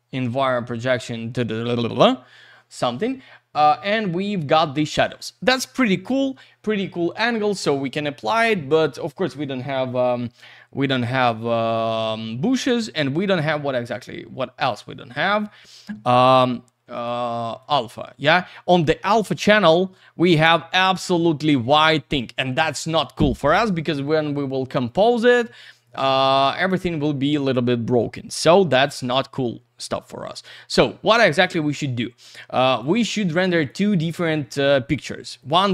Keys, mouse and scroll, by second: 17.0 click, 17.6 click, 25.8 click, 26.5 click, 32.7 click, 33.6 click, 35.4 click.